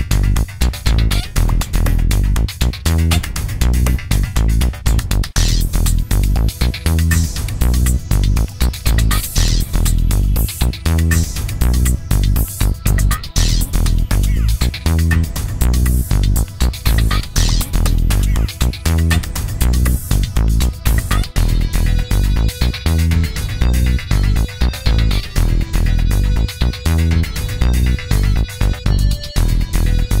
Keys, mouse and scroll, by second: 4.0 click, 6.1 click, 8.9-9.3 scroll down 2, 10.5 click, 13.9 click, 15.4-16.8 drag, 17.6 ctrl+d, 19.0-20.8 drag, 21.9 ctrl+d, 23.0-25.6 ctrl+drag, 26.8 ctrl+d, 27.6-29.2 drag.